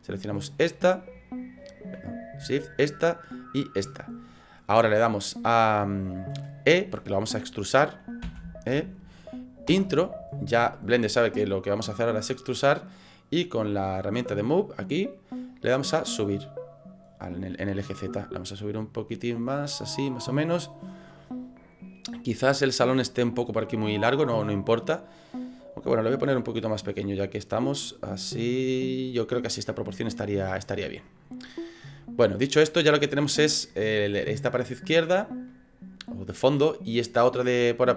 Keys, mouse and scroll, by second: 0.3 shift+right click, 2.1 right click, 3.4 shift+right click, 3.9 middle click, 8.3 e, 14.0 click, 15.7 click, 17.5 middle click, 18.8 click, 20.5 middle click, 26.4 click, 28.1 click, 29.5 middle click, 30.2 middle click, 31.3 middle click, 34.5 middle click, 35.6 middle click.